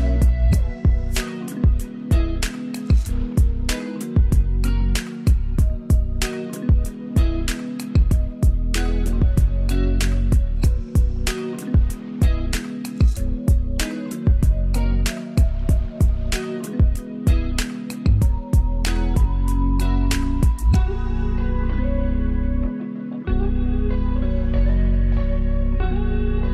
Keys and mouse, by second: 1.5 ctrl+space, 1.8 ctrl+alt+click, 2.8 ctrl+space, 3.0 ctrl+click, 6.3 ctrl+space, 6.5-26.5 ctrl+alt+drag.